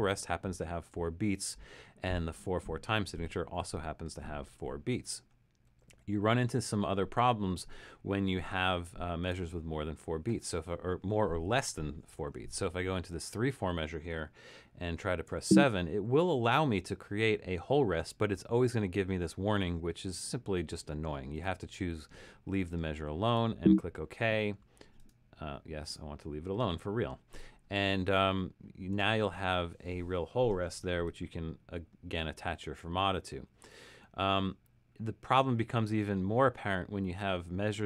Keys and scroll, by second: 15.3 7, 31.0 f.